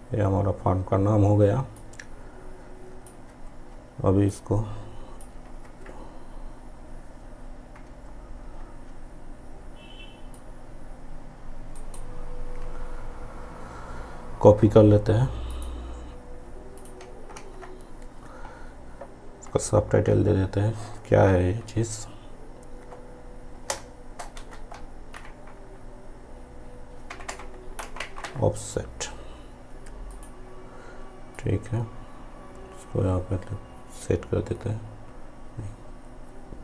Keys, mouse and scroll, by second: 3.2 ctrl+z, 4.3-5.7 drag, 5.7 ctrl+z, 10.4-11.8 ctrl+drag, 11.8 ctrl+right click, 15.6 click, 17.5 ctrl+a, 25.2 shift+o, 30.1-36.6 drag.